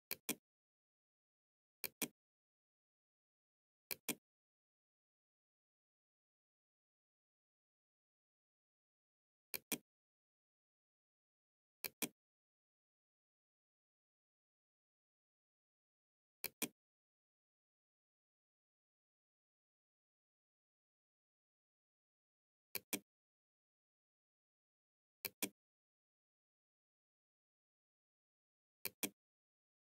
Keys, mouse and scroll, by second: 0.7 click, 3.0 click, 8.6 click, 10.9 click, 15.5 click, 21.8 click, 24.1 click, 27.9 click.